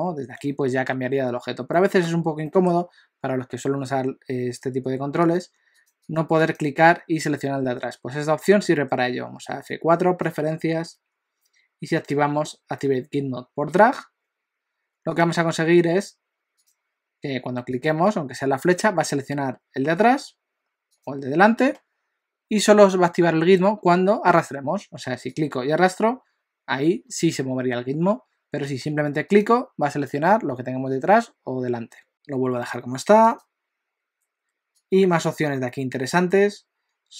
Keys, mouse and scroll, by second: 1.8 middle click, 2.4 middle click, 5.3 click, 5.8 click, 6.1 click, 6.4 click, 8.6 F4, 17.7 click, 21.0 click, 25.3 click, 29.5 click, 32.1 F4.